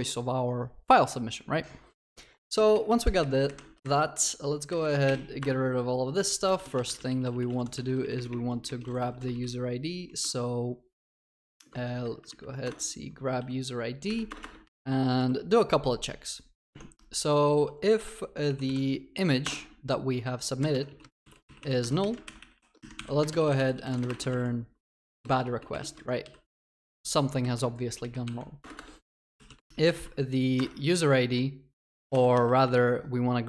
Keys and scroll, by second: 12.7 Return, 16.8 Tab, 22.2 ctrl+y, 30.6 Return, 32.1 ctrl+y.